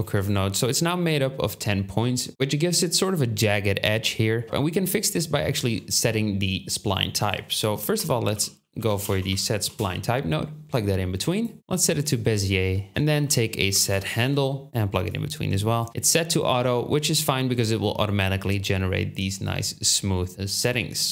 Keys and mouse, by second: 5.4 shift+a, 12.7-15.3 ctrl+drag, 12.9 shift+a.